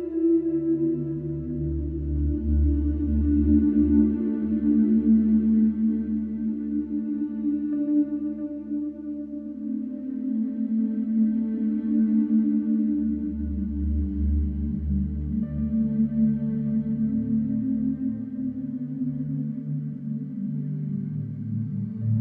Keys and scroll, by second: 0.2 F1, 3.2 ctrl+z, 11.3 ], 13.5 ctrl+d, 13.6 Escape, 14.8 Escape, 19.7 Delete.